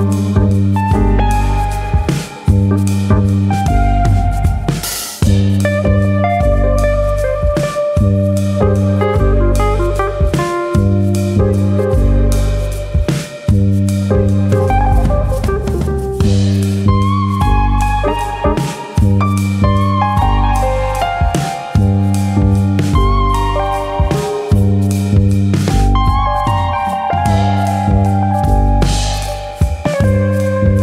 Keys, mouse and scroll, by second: 0.2 KP_1, 1.1 shift+middle click, 2.1 e, 3.5 click, 4.6 click, 5.5 r, 6.0 click, 6.9 e, 7.5 click, 7.8 s, 10.4 click, 12.4 r, 12.9 click, 13.5 click, 14.5 e, 15.0 click, 15.1 s, 16.8 click, 17.9 r, 18.4 click, 19.3 click, 20.9 r, 21.4 click, 22.7 e, 23.7 click, 24.5 2, 25.9 click, 26.9 click, 28.8 alt+click, 29.2 alt+click, 29.2 s, 30.6 click.